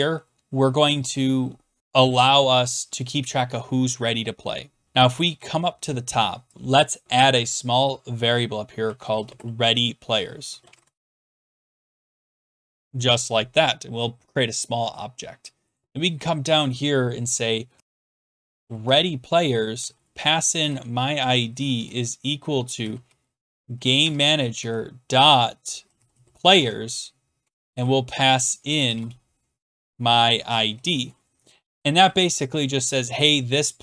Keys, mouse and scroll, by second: 3.4 scroll, 5.2-5.7 scroll, 6.5 click, 8.6-12.7 typing, 14.2-14.9 typing, 14.4 click, 14.8 scroll, 15.8 click, 16.7-23.9 typing, 24.0 Tab, 25.7-32.9 typing, 29.2 Tab.